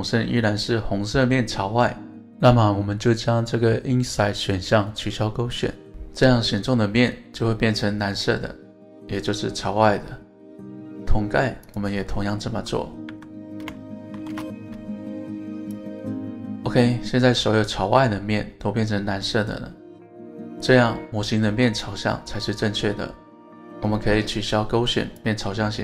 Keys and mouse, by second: 3.9 click, 5.2-10.5 middle drag, 11.2 Tab, 11.7 click, 12.1 Tab, 13.1 a, 14.1 ctrl+shift+n, 15.6 click, 16.0 click, 21.5 Tab, 21.8 click, 22.5-23.5 middle drag, 25.3-25.8 drag.